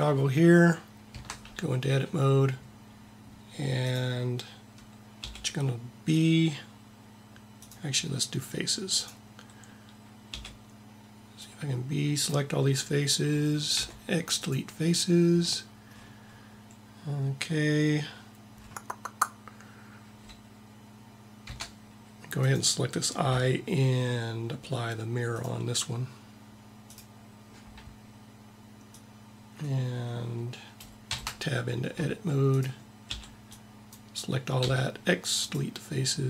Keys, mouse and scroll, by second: 1.1 Tab, 5.3 b, 10.3 b, 13.8 x, 21.5 Tab, 25.3-28.6 drag, 29.0-30.8 drag, 31.3 Tab, 32.5 click, 33.1 b, 34.0 b, 34.6 x, 35.6 x.